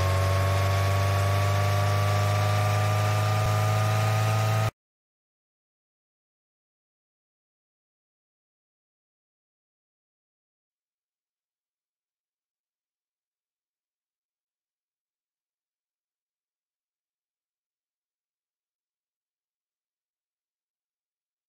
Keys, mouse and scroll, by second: 7.1 click, 10.5 click.